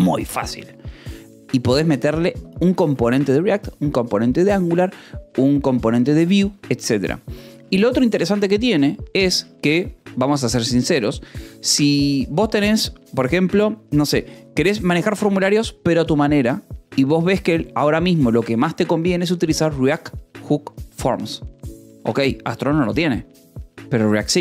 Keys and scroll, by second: 2.1 j, 2.5 Escape, 5.8-9.3 typing, 10.4 j, 10.8 k.